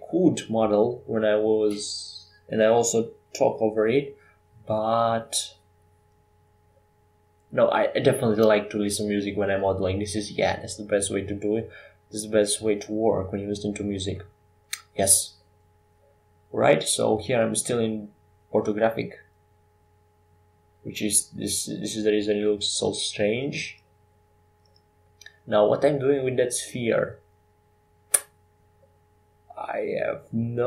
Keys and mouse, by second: 3.6-5.4 middle drag, 9.1-11.9 drag, 9.6 shift+a, 13.4 s, 16.7 x, 18.1 s, 21.6 s, 22.6 s, 28.6 g.